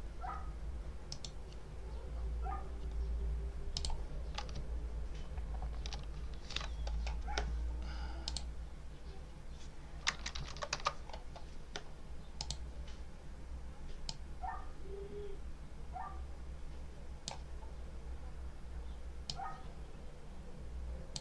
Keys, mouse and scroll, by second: 1.0 right click, 3.6 click, 4.6 ctrl+scroll up 2, 5.3 ctrl+scroll up 2, 8.1 click, 10.4 alt+2, 10.6 alt+3, 12.3 click, 13.9-17.3 drag, 19.1-21.2 drag.